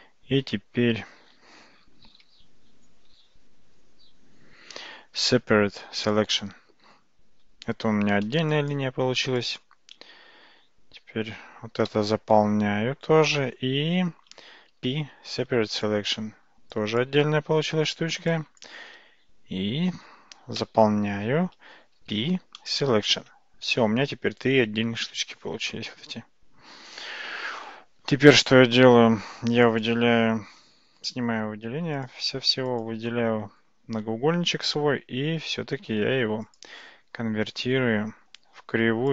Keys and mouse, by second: 3.7 p, 8.6 click, 9.5 shift+click, 11.9 f, 14.7 p, 16.8 click, 18.4 shift+click, 20.6 f, 22.1 p, 29.7 click, 31.1 Tab, 36.5-39.1 drag.